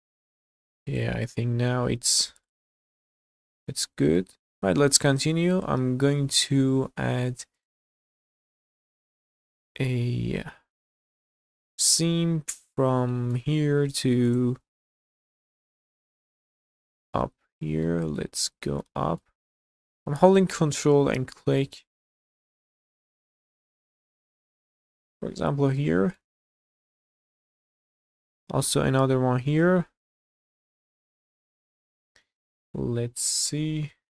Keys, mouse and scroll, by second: 0.9 click, 1.7 g, 2.6 scroll down 2, 3.3-3.9 scroll down 3, 3.9 middle click, 4.3-5.1 scroll up 5, 4.5 Tab, 4.5 z, 5.1 middle click, 6.9 2, 7.5 click, 8.9-13.4 middle drag, 14.3 ctrl+click, 15.8 ctrl+click, 16.5 scroll down 1, 16.8 shift+middle click, 17.1 middle click, 18.0 scroll up 1, 18.3 shift+middle click, 18.8 middle click, 20.3 ctrl+click, 21.9 ctrl+click, 22.4-22.8 scroll down 2, 22.7 shift+middle click, 23.2 middle click, 25.0 ctrl+click, 25.5 scroll down 1, 25.8 middle click, 26.6 q, 27.5 middle click, 28.2 scroll down 2, 28.4 shift+middle click, 29.1-29.4 scroll up 3, 29.5-31.2 shift+middle drag, 31.4 middle click, 31.9 shift+middle click, 32.5 middle click, 33.2 click, 33.9 KP_Decimal.